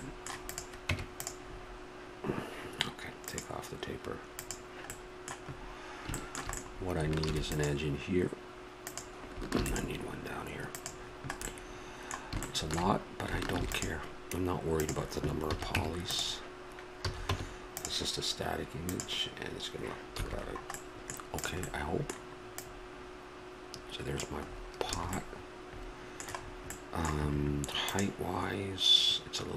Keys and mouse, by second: 0.9 Tab, 4.3-6.2 middle drag, 6.6 middle click, 7.2 ctrl+r, 9.5 ctrl+r, 11.0 middle click, 13.5 ctrl+r, 15.4 a, 15.8 Tab, 17.0 a, 17.3 Tab, 20.2 a, 21.4-23.6 right drag, 23.6 click, 24.5-28.0 middle drag, 24.9 a.